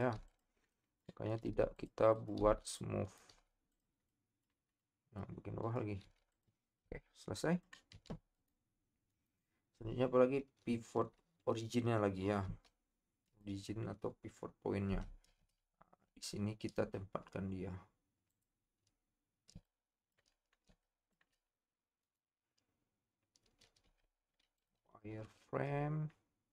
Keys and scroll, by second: 6.1 p, 7.9 Tab, 14.9 Tab, 15.3 shift+Caps_Lock.